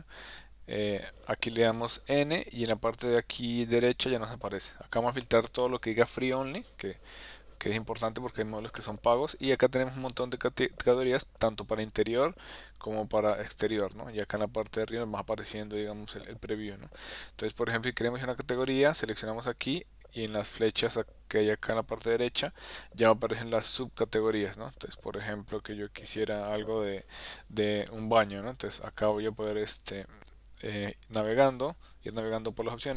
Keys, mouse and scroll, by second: 0.9 n, 4.1 click, 5.8 click, 12.4 click, 19.0 click, 21.7 click, 25.7 click, 29.4 click, 30.1 click.